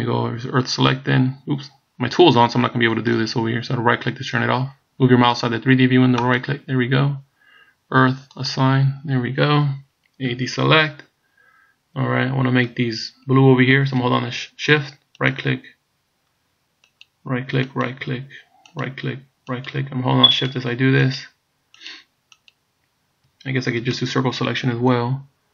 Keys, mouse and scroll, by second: 6.3 right click, 8.4 click, 10.3 a, 13.0 scroll up 2, 15.2 shift+right click, 17.0 shift+right click, 17.8 shift+right click, 18.8 shift+right click, 19.7 shift+right click, 20.5 shift+right click, 21.3 shift+right click, 21.9 shift+right click, 22.5 shift+right click, 23.9 c.